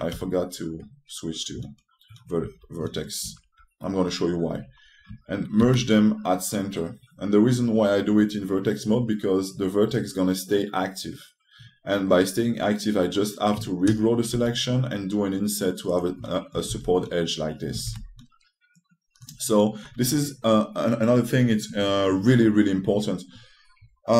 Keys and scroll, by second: 0.8 3, 6.3 e, 15.0 g, 17.4 shift+space, 18.5 shift+space.